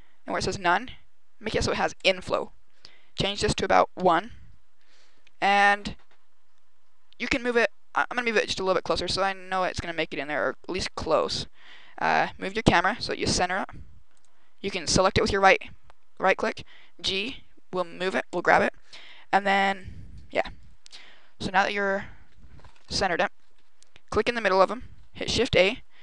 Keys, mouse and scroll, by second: 3.1 click, 7.1 g, 8.8 click, 10.3 g, 11.0 click, 12.3 right click, 13.0 g, 14.1 click, 14.7 right click, 16.4 g, 18.2 click, 24.0 click, 25.2 shift+a.